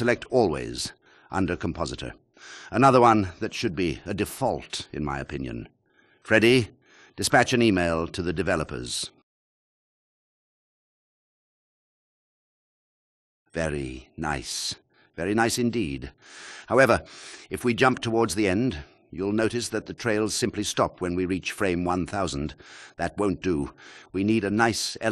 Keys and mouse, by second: 2.2-4.3 drag, 5.8 click, 7.4 click, 7.7 space, 20.1-20.8 drag, 23.2 space, 23.6 click.